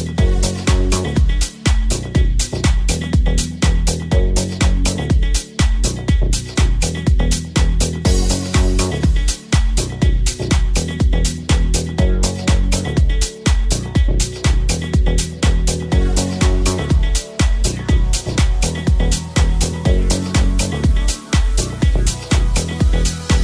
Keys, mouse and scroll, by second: 1.9 f, 2.3 alt+right click, 2.8 f, 4.2 ctrl+r, 5.2 ctrl+b, 6.6 z, 8.0 alt+right click, 8.0-9.3 alt+middle drag, 9.3 alt+shift+click, 9.4-15.6 alt+shift+middle drag, 15.6 Tab, 15.6-22.8 drag, 16.4 w, 17.4 Tab, 18.2 w, 18.3 w, 22.9 click.